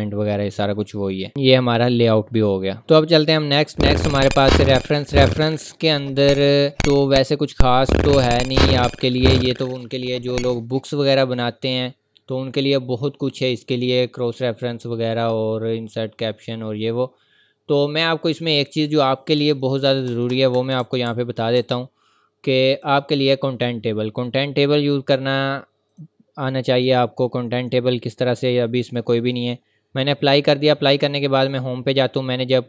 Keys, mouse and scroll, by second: 0.9 scroll up 1, 2.8 click, 5.1 scroll up 1, 6.5-7.1 ctrl+scroll up 2, 7.1 click, 18.4 click, 19.9 Return, 21.5 Down, 22.7 click, 30.2 click, 30.5-30.9 scroll down 1, 31.5 click.